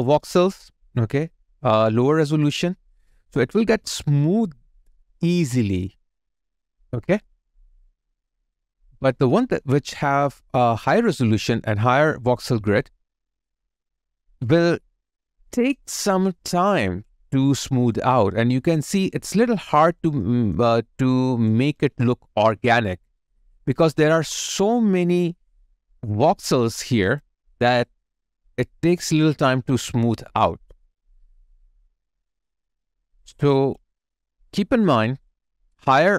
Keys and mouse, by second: 8.3 alt+click, 9.2 alt+middle click, 10.3 alt+right click, 10.7 alt+click, 17.4 alt+click, 17.5 alt+click, 19.1 alt+right click, 19.7 alt+click, 20.2 alt+middle click, 20.7 alt+click, 26.9 alt+right click, 27.2 alt+click, 27.8 alt+right click, 31.9 alt+right click, 32.2 alt+click, 33.8 alt+click, 33.9 alt+right click, 35.1 alt+right click, 35.4 alt+middle click, 35.8 alt+click.